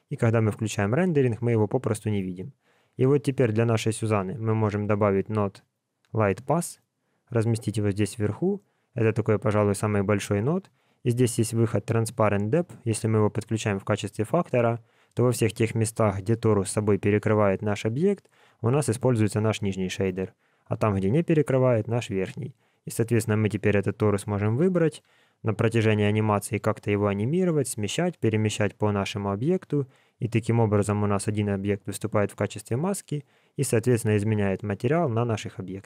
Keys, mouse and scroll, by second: 0.3 click, 2.6 click, 4.2 shift+a, 8.6 middle click, 12.5 click, 22.6 click, 24.5 g.